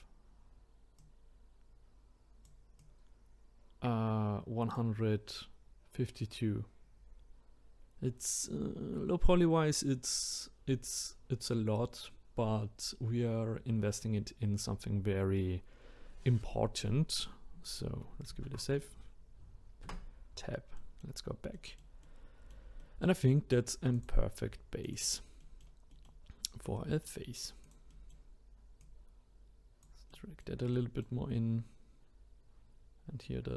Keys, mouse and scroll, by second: 1.0 click, 2.8 click, 18.3 ctrl+s, 19.8 Tab, 20.8-23.9 middle drag, 23.9 click, 24.8 click, 25.4 middle click, 26.3 scroll up 2, 26.8 middle click, 27.6 click, 27.9 middle click, 28.8 click, 30.1-33.5 middle drag.